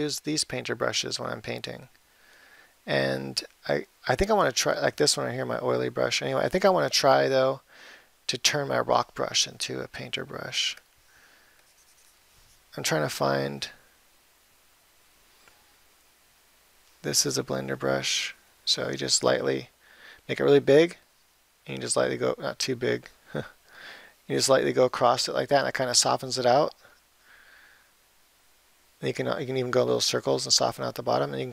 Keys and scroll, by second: 15.7 ], 19.6 ], 23.0 [.